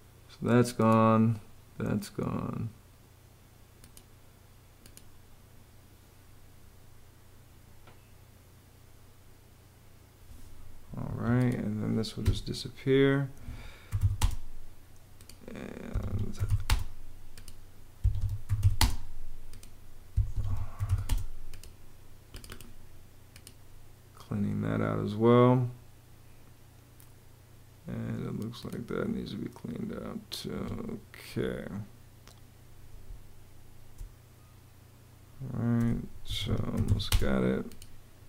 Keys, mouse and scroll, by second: 10.8 Escape, 12.0 BackSpace, 13.4-14.3 typing, 15.7 Escape, 15.9-16.7 typing, 17.8 Escape, 18.0-18.9 typing, 20.1 Escape, 20.3-21.2 typing, 30.3 Escape, 32.8 space, 36.0 Escape, 36.3-37.1 typing.